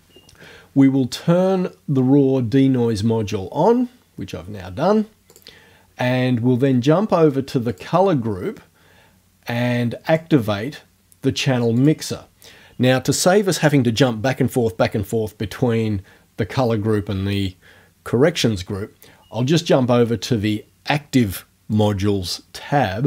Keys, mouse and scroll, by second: 5.3 click, 7.7 click, 10.1 click, 11.8 click, 21.7 click.